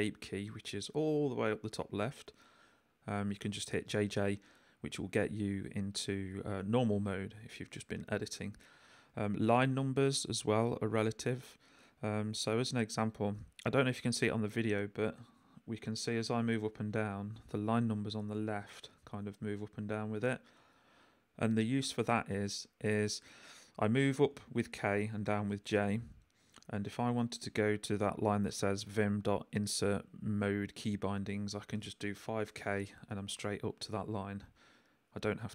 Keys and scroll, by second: 7.4 j, 9.1 k, 9.5 j, 11.9 Escape, 15.3 k, 15.9 j, 16.9 k, 18.4 j, 24.1 k, 25.2 j, 31.8-32.7 typing.